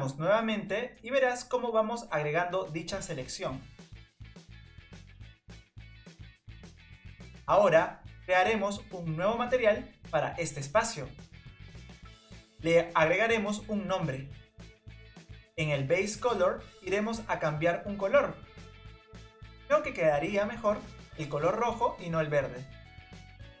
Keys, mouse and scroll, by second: 0.1 ctrl+KP_Add, 6.0 ctrl+KP_Add, 7.0 ctrl+KP_Add, 9.1-12.0 drag, 12.0-13.1 drag, 13.1 e, 15.5-17.1 drag.